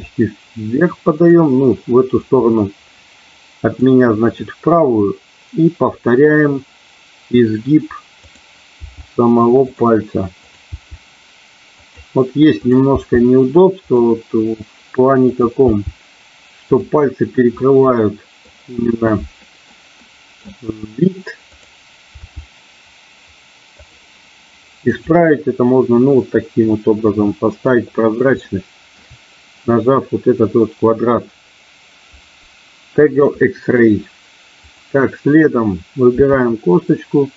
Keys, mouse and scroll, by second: 1.1 click, 2.2-3.7 middle drag, 4.4-7.2 middle drag, 8.2 click, 8.9 g, 10.5 click, 10.6 g, 11.7 click, 12.6 click, 13.6 g, 13.7 click, 15.6 g, 17.5 middle click, 19.4 middle click, 20.0 middle click, 21.6 click, 22.1 g, 23.7 click, 25.0 click, 25.5-27.6 middle drag, 28.4 shift+middle click, 34.7 click, 36.1 e.